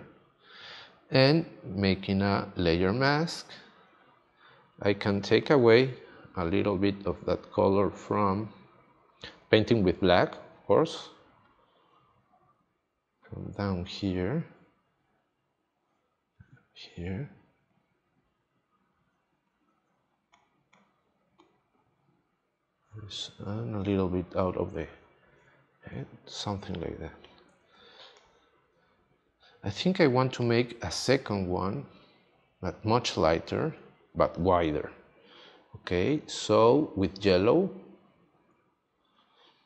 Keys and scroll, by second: 10.3 x, 27.7 space, 37.9 x.